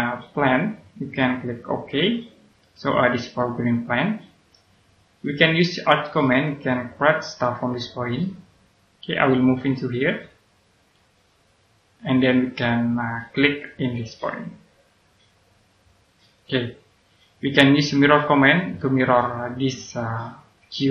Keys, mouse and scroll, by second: 0.3 click, 3.3 middle click, 4.2-6.2 scroll up 1, 6.2 click, 9.0 click, 13.2 click, 16.2 click.